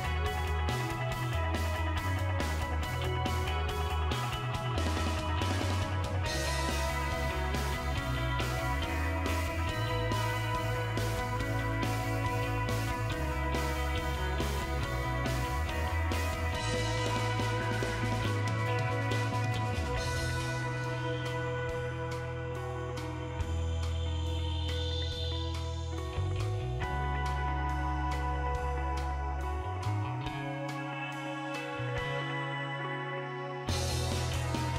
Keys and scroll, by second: 2.9 Delete.